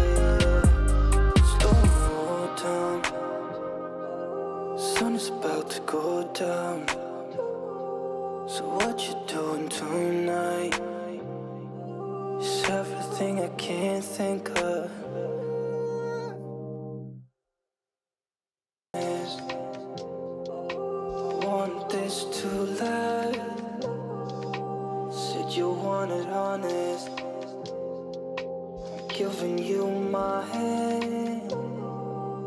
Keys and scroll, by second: 15.5 ctrl+space.